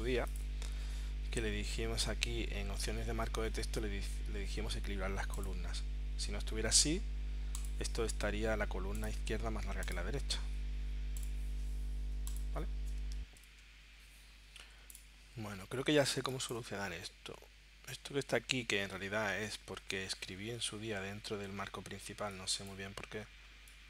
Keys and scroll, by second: 13.2 shift+9, 16.2 space.